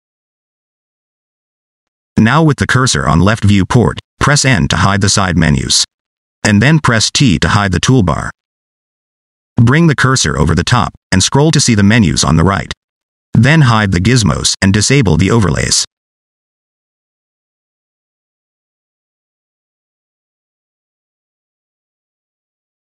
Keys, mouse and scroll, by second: 0.6 click, 3.3 click, 3.5 n, 8.3 t, 11.4-13.3 scroll down 13, 13.3 click, 13.7 click, 13.9 click, 15.0 click, 16.7 scroll up 1, 20.7-21.3 scroll up 1, 21.3 click.